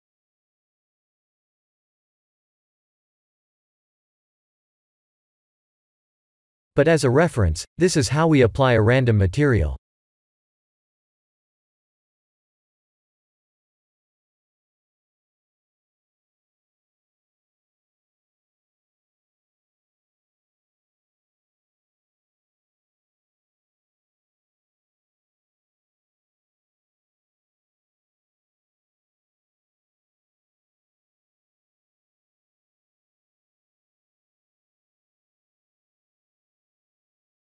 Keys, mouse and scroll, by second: 0.1 shift+a, 4.6 click, 6.5 click, 8.7 click, 9.8 click, 11.4 click, 12.6 click, 13.8 click, 15.3 click, 16.8 click, 17.9 click, 19.0 click, 22.5 click, 23.2 click, 28.3 click, 28.9 click, 33.7 click, 34.4 click.